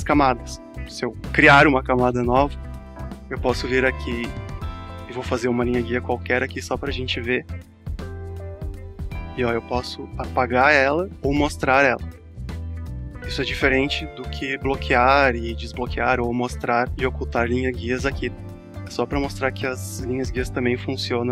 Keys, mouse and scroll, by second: 3.7 click, 6.1-15.6 drag, 15.8 click, 18.9 click.